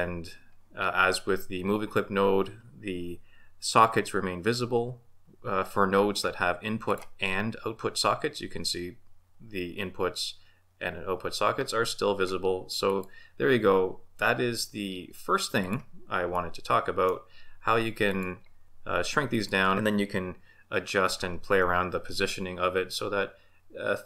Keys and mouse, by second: 6.9 click, 12.9 click, 15.6 click, 16.3-17.1 middle drag, 18.0 click, 19.3 click.